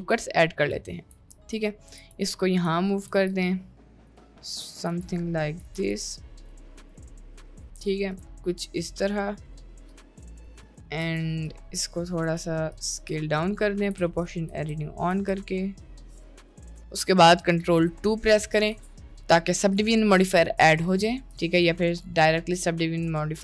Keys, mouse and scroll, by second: 0.5 click, 1.2 g, 3.1 g, 5.8 g, 6.4 click, 6.6 g, 6.9 g, 7.9 click, 8.3 g, 9.6 Tab, 9.9 Tab, 10.5 g, 10.7 Tab, 11.1 Tab, 11.5 click, 12.3-15.1 typing, 16.7 Tab, 19.1-21.4 drag, 23.2-23.4 drag.